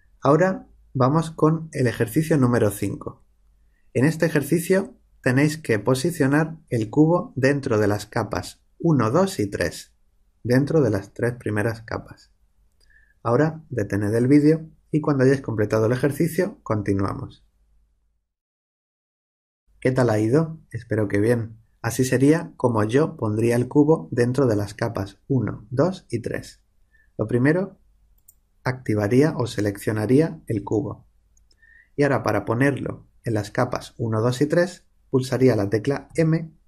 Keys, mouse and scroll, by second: 28.1-29.9 drag, 36.0 m.